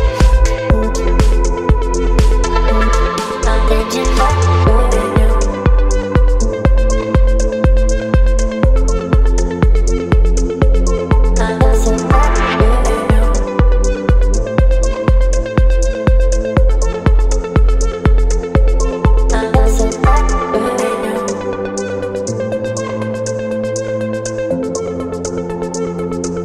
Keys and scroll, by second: 0.8 Delete, 4.9 Delete, 5.2 space, 7.2 Delete, 7.9 space, 9.7 Delete, 11.0 Delete, 11.4 space, 13.8 Delete, 15.9 Delete, 17.7 Delete, 18.8 Delete, 21.3 Delete, 22.2 space, 23.5 Delete, 26.1 Delete.